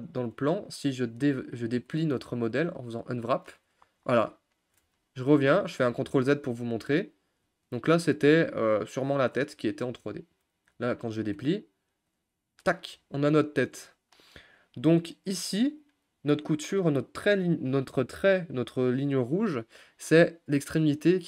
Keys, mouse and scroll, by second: 0.8 a, 3.2 u, 5.9 ctrl+z, 12.2 u.